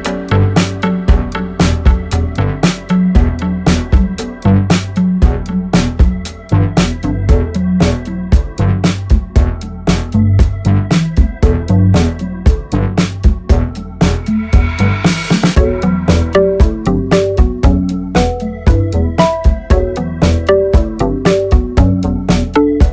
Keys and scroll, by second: 0.6 ctrl+e, 3.1 ctrl+e, 7.1 ctrl+e, 13.4 alt+s, 15.0 ctrl++, 21.0 ctrl+r, 21.7 Escape.